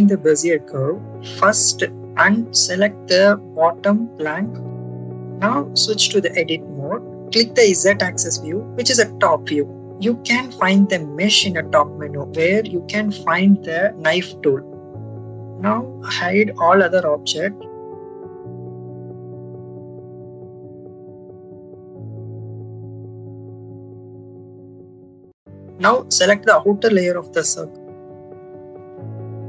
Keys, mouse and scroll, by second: 0.2 click, 1.7 shift+click, 5.3 Tab, 8.1 click, 10.5-14.1 drag, 17.6 click, 18.0 click, 18.6 click, 18.9 click, 19.8 click, 20.4 click, 22.0 click, 24.6 click, 25.0 click, 25.7 click, 26.5 shift+click, 27.1 shift+click, 27.8 shift+click, 28.5 shift+click, 29.3 shift+click.